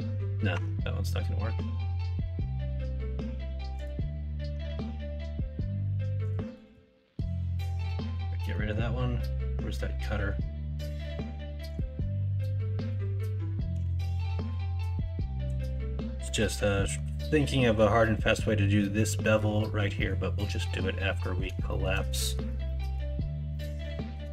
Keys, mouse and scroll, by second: 0.5 Tab, 4.7 Tab, 8.5 middle drag, 13.7 x, 14.8 middle click, 15.6 middle click, 16.2 middle drag, 16.7 middle drag, 17.5 middle drag, 19.9 middle drag, 20.6 middle click, 21.0 middle click, 21.6 shift+middle drag, 22.1 middle drag, 22.6 shift+middle drag, 23.5 middle drag, 23.8-24.1 middle drag.